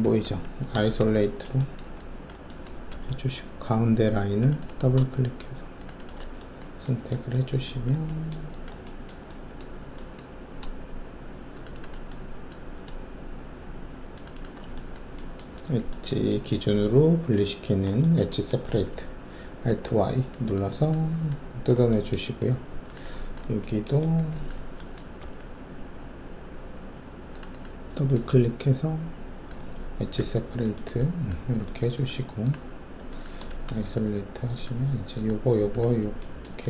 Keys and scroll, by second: 0.2 alt+`, 0.8 alt+shift+a, 2.9 alt+2, 19.6 alt+y, 25.2 alt+2, 30.1 alt+y, 33.5 alt+shift+a.